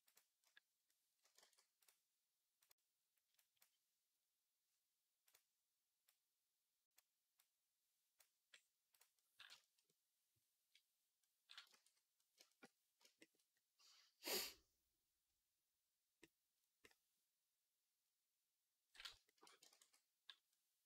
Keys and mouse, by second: 1.2-2.5 ctrl+drag, 1.3 ctrl+s, 1.7 middle click, 1.7-20.2 right drag, 5.1 click, 5.1 middle click, 8.7 click, 8.7 middle click, 11.9 ctrl+s, 19.6 ctrl+s, 20.5-20.8 right drag.